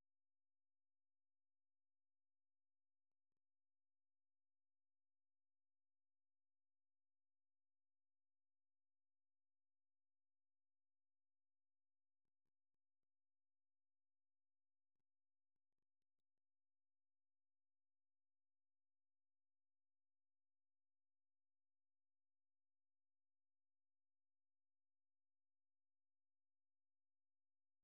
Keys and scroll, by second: 12.7 alt+Tab, 15.6-23.0 typing, 25.1 j.